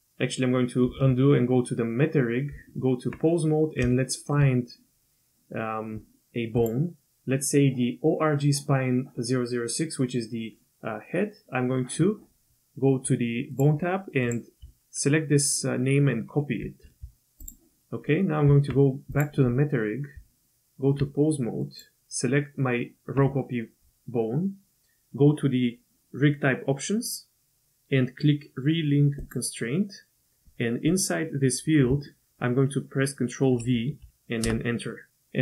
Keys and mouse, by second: 0.9 ctrl+z, 2.5 Tab, 3.9-4.3 shift+middle drag, 4.3 shift+click, 6.6 click, 14.3-17.5 drag, 18.1 click, 18.4 Tab, 19.1 click, 20.1 Tab, 21.6 click, 29.2 click, 30.9-34.9 drag.